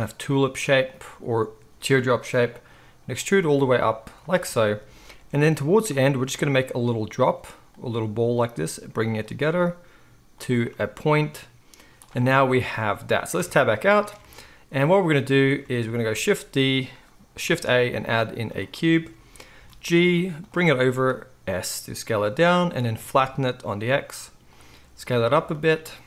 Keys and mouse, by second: 0.0-1.0 typing, 2.6 e, 3.3 e, 5.3-9.5 typing, 5.9 right click, 6.5-20.4 drag, 11.8 z, 13.4 Tab, 14.2 alt+a, 16.2 shift+a, 17.8 shift+a, 19.6 g, 20.4-26.0 right drag, 20.9 s, 23.0 s, 24.6 s.